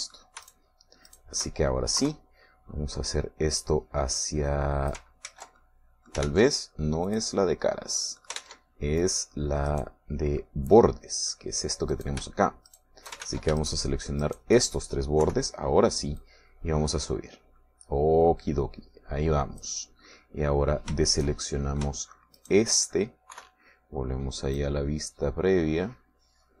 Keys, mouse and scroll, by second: 0.4 right click, 1.5 shift+right click, 2.1 shift+right click, 2.4 shift+middle click, 3.0 KP_3, 3.1 middle click, 4.6-6.2 drag, 6.3 ctrl+z, 6.6 ctrl+middle click, 7.4 ctrl+Tab, 8.1 click, 9.4 ctrl+middle click, 9.4 ctrl+Tab, 9.4 ctrl+click, 10.0 click, 10.8 right click, 11.4-12.6 middle drag, 13.0 shift+right click, 13.8 shift+right click, 14.3 ctrl+shift+z, 14.6 ctrl+shift+right click, 16.3 KP_3, 17.2-20.8 drag, 21.2 middle click, 22.3 shift+middle click, 22.9 shift+click, 23.4 shift+right click, 24.4 KP_3, 25.6-26.6 drag.